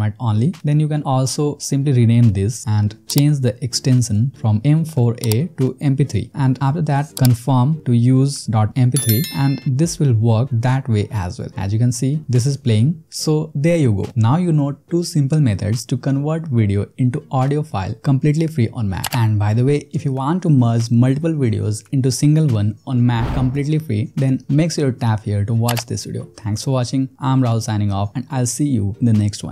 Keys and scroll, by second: 2.9 Right, 4.2 BackSpace, 5.6 p, 6.2 3, 7.1 Return, 12.2 space.